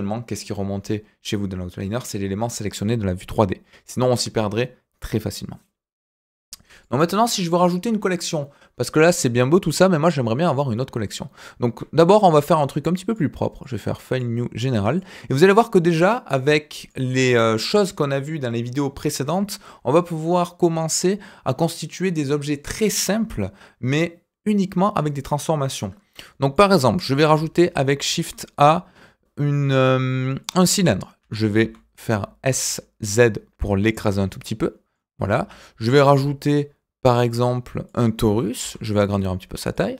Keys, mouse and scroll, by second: 6.7 click, 12.0 click, 13.1-15.0 drag, 16.3 click, 17.2 Delete, 26.5 middle drag, 26.9 shift+a, 30.8 middle drag, 31.2 s, 34.1-34.4 scroll up 2, 34.4-34.9 middle drag, 35.3 shift+a, 39.9 click.